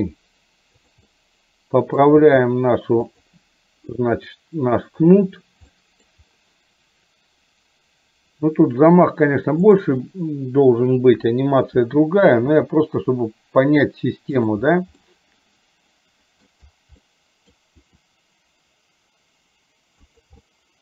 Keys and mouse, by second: 1.2 middle click, 2.3 g, 5.7 middle click, 9.7 click, 11.2 KP_7, 12.8 r, 15.2-16.5 middle drag, 17.0 middle click, 17.9 r, 20.6-20.8 middle drag.